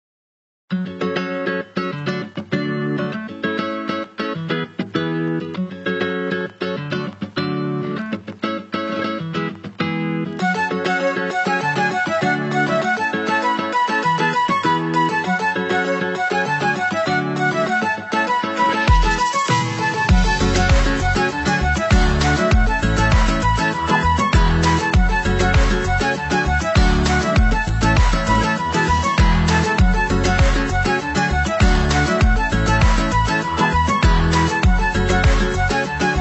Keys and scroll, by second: 23.4 ctrl+=, 34.3 ctrl+-.